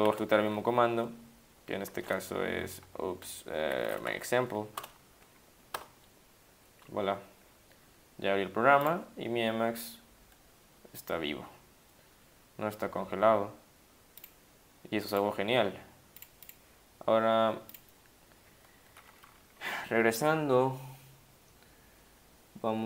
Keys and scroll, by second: 0.3 typing, 2.3 Up, 3.6 typing, 4.8 Return, 5.8 Return, 19.3 Down, 19.4 Down.